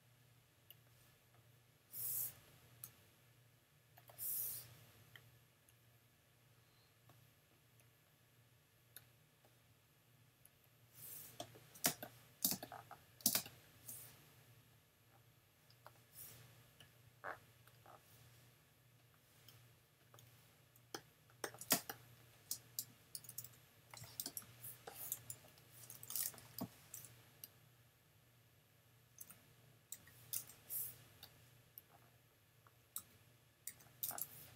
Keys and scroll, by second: 2.8 x, 11.9 super+space, 12.5 space, 21.7 super+space, 22.7 space, 23.2 super+-, 24.3 super+space, 26.6 n, 29.9 super+j, 33.7 super+j.